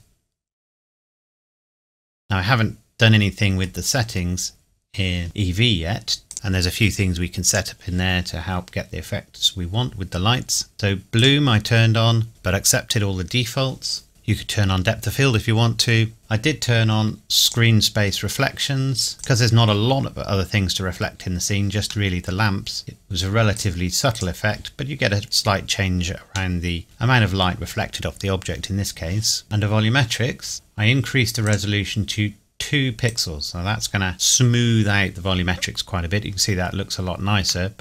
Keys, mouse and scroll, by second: 0.0-3.7 middle drag, 3.9-4.2 scroll up 1, 4.2-4.7 scroll down 1, 6.3 click, 10.7 click, 11.2 click, 14.1 click, 17.4 click, 20.2-20.6 scroll up 1, 22.1 middle click, 23.6 click, 25.3-26.0 scroll down 1, 26.8 middle click, 29.4 click, 31.4 click, 37.7 middle click.